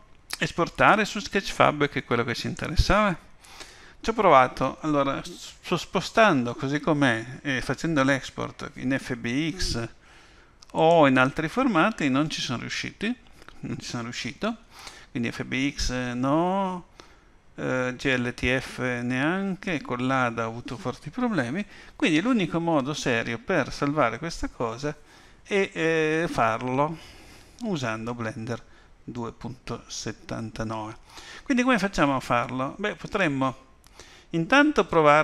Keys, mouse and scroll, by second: 11.5 click.